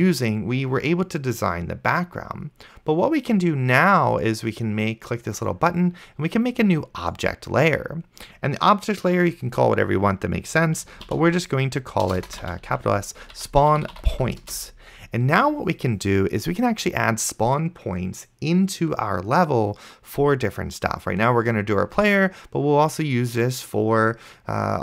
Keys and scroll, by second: 10.8-14.7 typing.